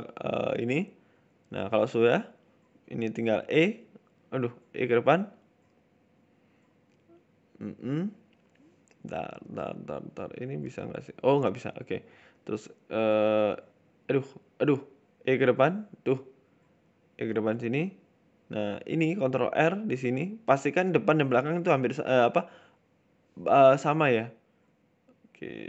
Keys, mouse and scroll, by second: 2.2 click, 2.6 right click, 3.1 r, 4.2 e, 8.9 middle click, 9.9 shift+right click, 10.4 KP_7, 10.9 e, 11.4 ctrl+z, 12.2 right click, 12.8 r, 13.4 e, 14.9 g, 17.6 right click, 18.1 middle click, 18.6 KP_7, 19.0 ctrl+r, 21.1 middle click, 21.4-21.9 scroll up 1, 21.9 middle click, 23.0 click, 23.5 right click, 24.0 Delete, 25.3 ctrl+z.